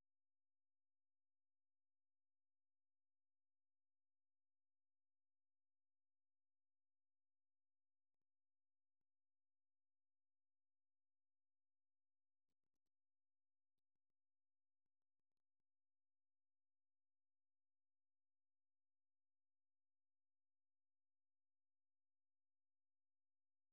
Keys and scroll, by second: 6.1-13.2 typing, 10.4 alt+Tab.